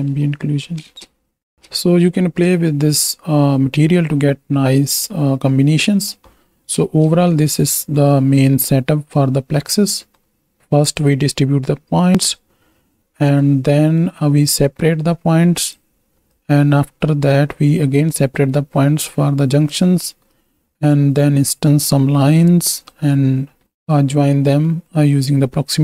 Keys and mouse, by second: 0.8 ctrl+space, 2.5 ctrl+space, 5.9 click, 6.8 ctrl+space, 7.3 click, 8.0 click, 10.8-12.3 drag, 13.4 click, 14.5-15.8 right drag, 16.3-19.8 right drag, 20.3-23.0 right drag, 23.9 ctrl+space, 24.8 click.